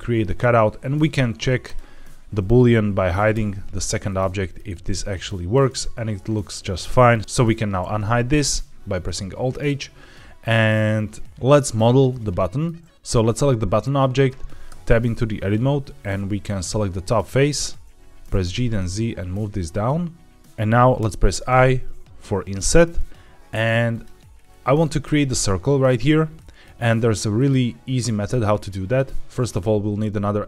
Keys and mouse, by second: 3.2 h, 4.0-4.5 middle drag, 5.2-5.6 middle drag, 6.8 middle click, 7.7 alt+h, 12.0 middle click, 14.6 Tab, 15.9 3, 18.1 g, 18.3 z, 20.9 |, 24.7 shift+middle click, 26.3 middle click, 27.3 middle click.